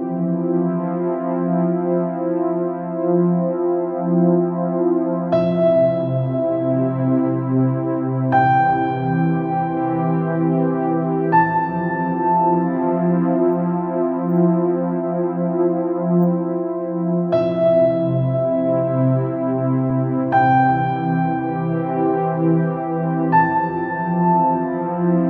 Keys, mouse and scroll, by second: 0.7 alt+e, 10.1 click, 10.7-11.2 scroll down 4, 11.2 middle click, 11.7 scroll up 3, 11.9 scroll down 1, 12.1 middle click, 12.8-13.4 scroll up 2, 14.1 click, 15.6 click, 18.0 alt+click, 18.8 alt+click, 20.5 ctrl+b.